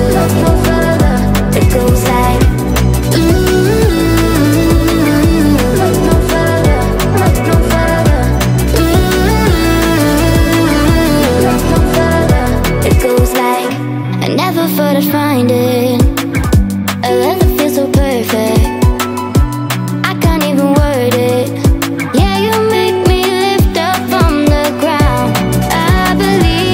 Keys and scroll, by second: 20.0 space, 25.0 space.